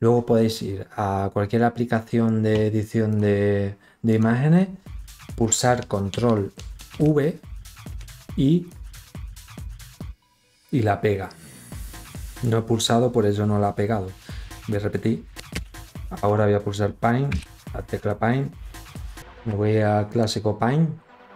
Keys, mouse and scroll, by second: 1.4 click, 2.5 click, 5.3 ctrl+v, 7.1 click, 18.1 click, 20.6 ctrl+scroll up 2.